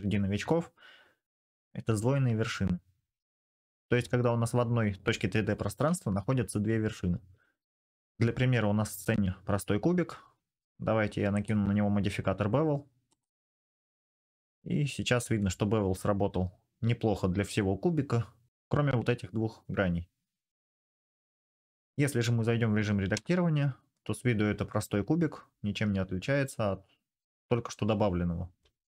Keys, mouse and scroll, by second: 14.5-15.2 middle drag, 15.2-21.0 drag, 21.1-26.9 drag, 22.9 Tab, 26.9 middle click, 27.3 click, 27.5 middle click, 28.1 click, 28.2 middle click.